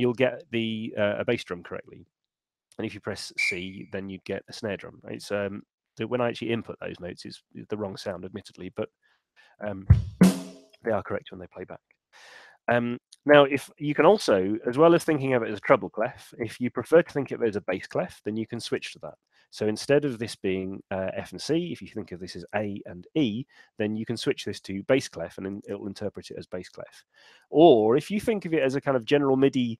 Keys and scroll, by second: 9.1 Left, 9.5 Home, 9.9 Left, 10.1 Right, 12.9 super+z, 13.9 super+,.